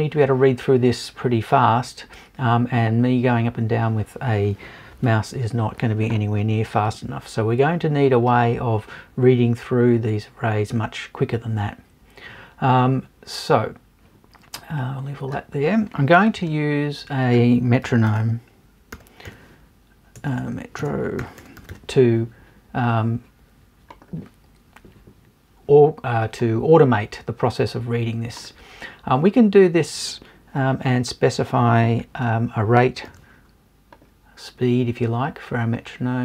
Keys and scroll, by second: 20.2 BackSpace.